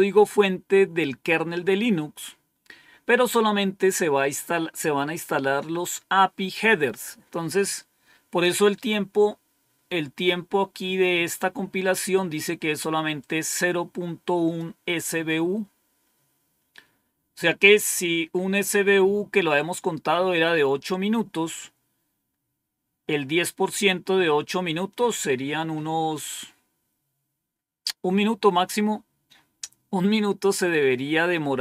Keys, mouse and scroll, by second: 13.1-14.5 drag, 15.0 click.